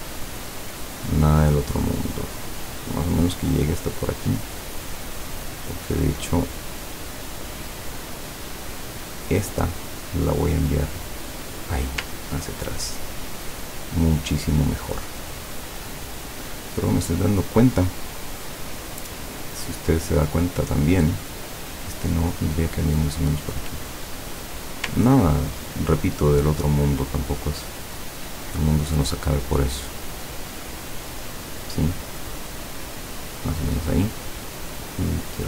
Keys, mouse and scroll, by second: 0.4 click, 3.1 click, 4.8 click, 6.9 click, 7.8 click, 8.8 click, 9.3 click, 11.0 click, 12.3-12.9 ctrl+scroll down 2, 20.0 click, 20.8 click, 21.7-24.2 drag, 25.1-25.6 ctrl+scroll up 2, 28.1-29.3 drag, 30.1-31.4 drag, 32.7-33.9 drag, 34.9-35.4 drag.